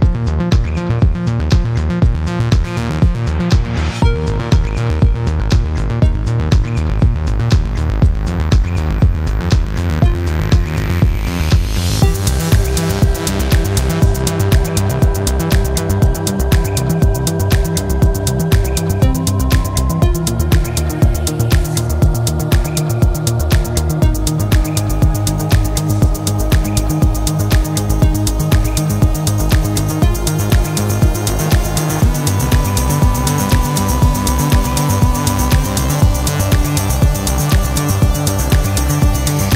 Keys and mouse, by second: 6.9-8.8 drag, 9.0 shift+a, 20.2-28.9 drag, 29.6-31.0 drag, 32.9-39.5 drag.